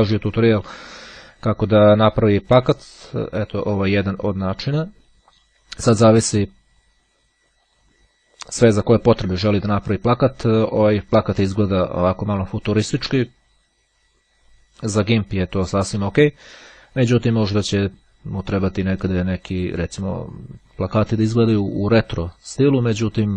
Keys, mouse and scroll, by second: 7.7 click.